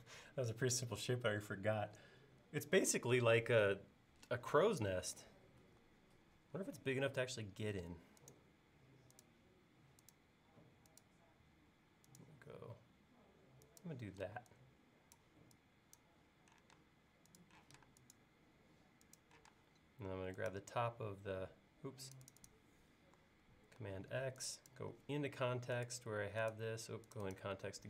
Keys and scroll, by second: 5.6 super+Tab, 14.3 e, 16.8 space, 19.6 space, 23.8 super+x.